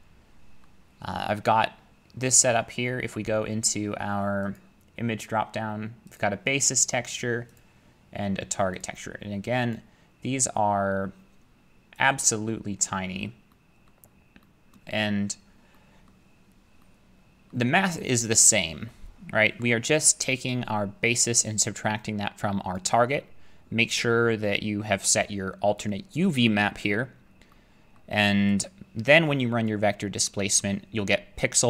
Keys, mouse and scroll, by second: 0.6-1.7 scroll, 1.7-2.5 scroll, 4.6 click, 6.2 click, 7.2 click, 7.6 click, 8.8 click, 9.8 click, 12.1 click, 13.0 middle click, 13.9 middle click, 14.0 middle click, 14.0 middle click, 14.1 middle click, 14.7 middle click, 15.0 middle click, 15.0 middle click, 15.1 middle click, 15.3 middle click, 15.6 middle click, 16.1 middle click, 16.4 middle click, 16.9-17.5 scroll, 17.5-18.1 scroll, 19.6 scroll, 21.2 click, 22.8 click, 28.0 middle click, 29.7 click, 30.6 middle click.